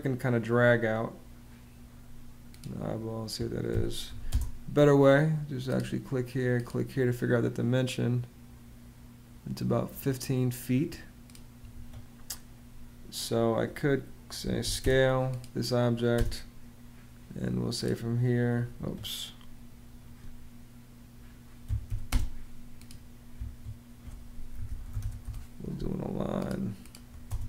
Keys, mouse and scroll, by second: 3.4 d, 3.8 i, 4.0 space, 11.4 Escape, 13.9-14.8 typing, 15.9 space, 18.5 Escape, 21.1-22.1 typing, 23.1 Escape, 24.1-25.2 typing, 27.0 space.